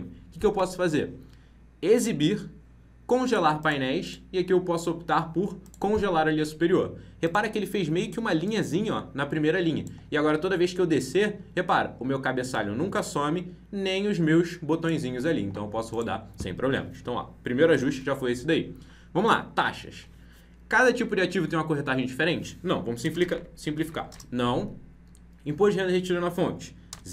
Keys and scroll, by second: 17.9 ctrl+b.